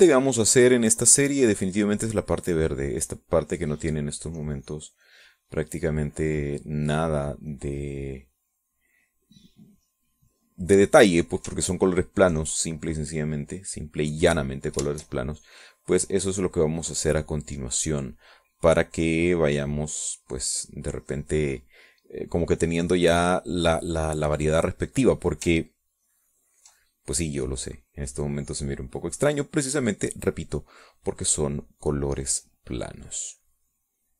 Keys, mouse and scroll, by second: 1.6 middle click, 2.1 middle click, 4.4 middle click, 5.3-7.1 drag, 8.4-12.0 drag, 13.2 ctrl+click, 13.9-21.8 drag, 22.1-26.0 middle drag, 27.2 ctrl+click, 28.3-34.1 drag.